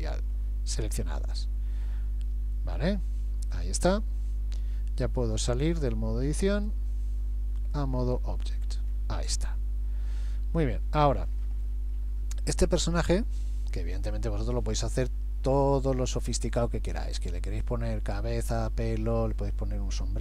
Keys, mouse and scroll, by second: 1.2 click, 3.2 a, 3.8 a, 3.9 a, 6.6 click, 8.4-9.1 scroll down 5, 9.5 middle click, 9.5 scroll down 3, 12.6-13.2 scroll up 3.